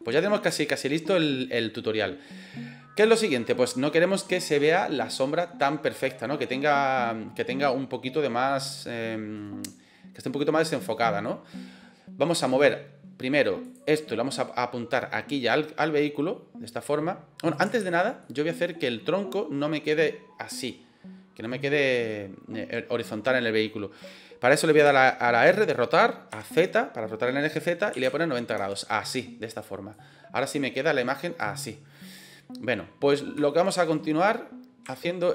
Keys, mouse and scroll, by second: 0.5-0.9 shift+middle drag, 3.2 shift+middle click, 13.5 click, 15.0-17.6 drag, 17.7 ctrl+z, 18.1-18.6 middle drag, 24.7 r, 26.2 z, 29.8-31.3 drag, 32.2-32.6 middle drag, 33.4 shift+click, 33.5-33.8 shift+middle drag, 34.8-35.2 shift+middle drag.